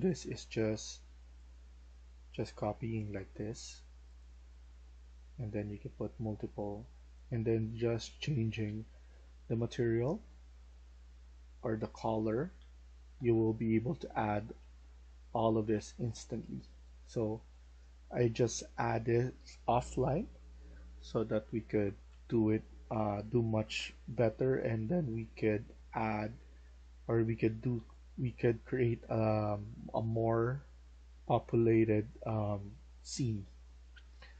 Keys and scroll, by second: 11.6-14.3 typing, 15.4-16.8 typing, 17.9-18.6 typing, 20.1-22.7 typing, 24.7-28.7 typing, 30.8 F1, 30.8 F1, 32.0-34.3 typing.